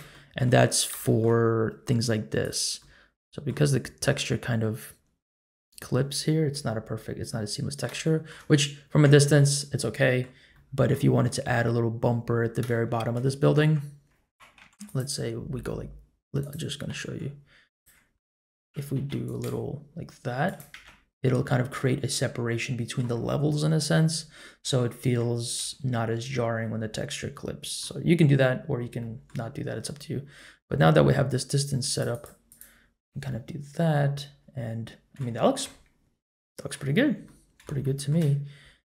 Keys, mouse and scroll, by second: 0.1 shift+middle drag, 1.0 shift+middle drag, 1.4 scroll up 1, 2.4 click, 2.8 middle click, 3.8-4.1 scroll up 1, 6.8 scroll down 1, 7.3-7.8 middle drag, 8.0 shift+middle click, 9.5-10.3 middle drag, 10.5 middle click, 12.7-13.6 shift+middle drag, 13.6 Tab, 14.6 ctrl+r, 16.9 3, 17.7 alt+click, 18.1 middle click, 18.9 alt+e, 20.7 Tab, 21.4-21.9 middle drag, 22.1-23.3 middle drag, 24.2 ctrl+z, 24.6 ctrl+z, 25.6 Tab, 27.3 middle click, 28.6-29.0 scroll down 1, 29.0 middle click, 29.5-30.4 scroll up 1, 31.9 click, 32.2 click, 32.5 click, 32.8-33.3 scroll down 1, 33.3-35.2 middle drag, 35.3 shift+middle click, 35.6-36.7 middle drag, 36.9 scroll up 2, 37.2-37.6 middle drag, 37.8 shift+middle drag.